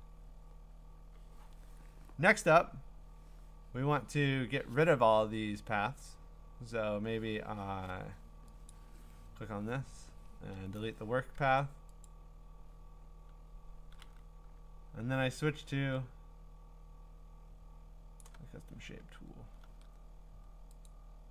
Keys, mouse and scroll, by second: 1.7 Return, 8.7 click, 10.3 Return, 12.0 click, 18.2 click, 18.8-19.3 scroll, 20.9 click.